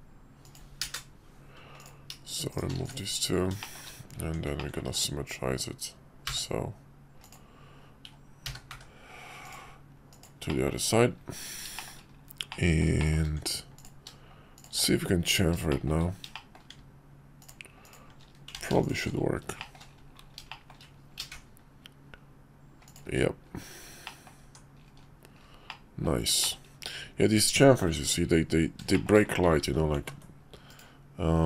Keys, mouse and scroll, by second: 1.8 click, 2.5 shift+click, 2.7 x, 3.6 shift+middle click, 4.2 Tab, 4.6 middle drag, 4.9 alt+x, 10.2 drag, 10.5 middle click, 11.3 Tab, 11.8 shift+middle click, 12.5 click, 13.0 shift+click, 15.7 shift+middle click, 16.3 shift+click, 18.6 ctrl+z, 19.6 shift+middle click, 20.5 shift+middle click, 24.1 middle click, 24.4 Tab, 25.7-26.0 middle drag, 26.4 shift+middle click, 28.9 shift+middle click, 31.0 ctrl+z, 31.0 ctrl+z.